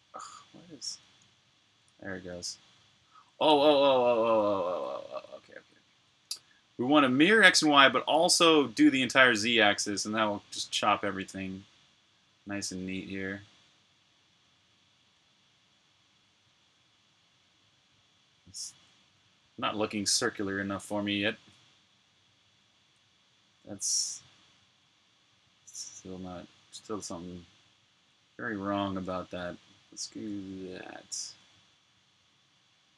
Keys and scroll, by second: 3.5 super+z.